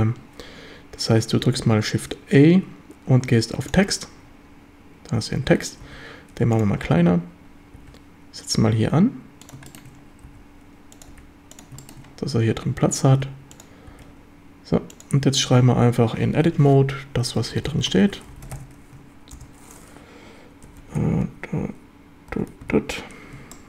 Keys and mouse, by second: 6.6 click, 6.6 s, 7.8 g, 9.5 click, 9.7 shift+middle drag, 10.3 s, 11.0 click, 11.1 g, 11.5 click, 11.8 shift+middle drag, 13.1 s, 13.6 click, 13.9 g, 15.0 click, 15.5 Tab, 17.4-19.4 typing, 20.7 KP_1, 20.8 KP_9, 23.4 KP_5, 23.4 KP_8, 23.4 KP_3, 23.5-23.6 shift+drag.